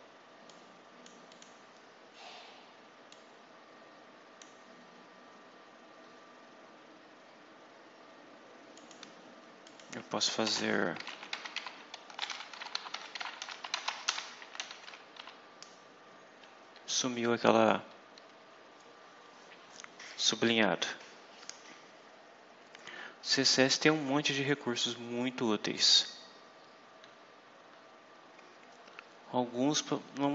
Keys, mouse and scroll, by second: 0.4-1.5 drag, 3.0-4.5 drag, 4.6-5.6 scroll down 4, 5.8-6.6 scroll up 4, 7.5-7.8 scroll up 2, 8.6 click, 9.5 click, 10.4 Return, 10.6-15.5 typing, 24.4-25.8 drag.